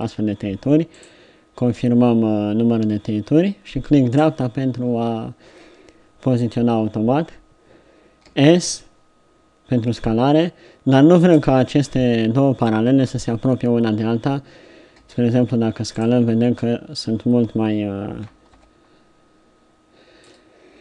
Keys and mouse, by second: 8.3 s, 15.0 s, 16.0-18.2 drag, 18.6 ctrl+z.